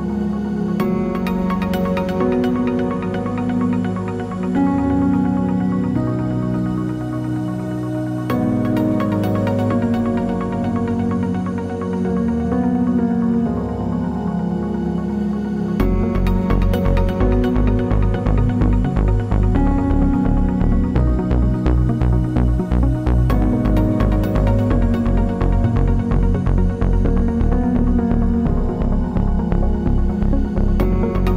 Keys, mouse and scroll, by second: 0.7 scroll up 1, 1.0 shift+middle click, 1.3 Tab, 3.0-7.3 middle drag, 3.0 shift+a, 5.6 KP_Enter, 6.4 s, 7.3 click, 7.5 g, 9.0 shift+click, 9.4 shift+Tab, 9.7 g, 10.5-14.3 middle drag, 12.8 s, 14.3 click, 14.7 ctrl+r, 17.7 click, 17.8 Tab, 18.0-19.7 middle drag, 19.0 Tab, 19.7 l, 20.1 3, 20.4 s, 21.1 click, 21.2 middle click, 21.3 g, 22.1 click, 22.2 middle click, 22.6 Tab, 22.7 middle click, 22.9 scroll down 1, 23.2 middle click, 23.7 scroll down 1, 24.5 shift+d, 26.0 middle click, 26.1 click, 26.2-26.8 middle drag, 26.8 scroll up 1, 27.3 click, 27.5 Tab, 29.0 l.